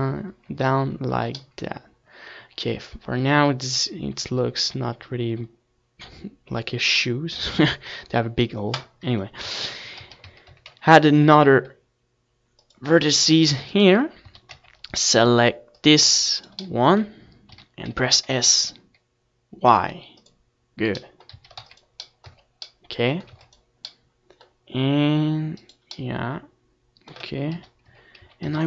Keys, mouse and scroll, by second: 0.2 a, 0.4 c, 0.9-2.7 right drag, 1.3-3.9 drag, 3.6 ctrl+s, 4.7 z, 5.3 Tab, 12.7-14.8 middle drag, 13.9 KP_1, 14.4 Tab, 15.0 z, 15.3 a, 16.2 ctrl+r, 19.1-21.2 right drag, 19.6 a, 20.0 c, 21.2 middle click, 22.1 right click, 22.4-23.8 middle drag, 23.3 z, 23.7 s, 26.1-27.9 drag, 27.3 a, 27.5 ctrl+s, 28.3 Tab.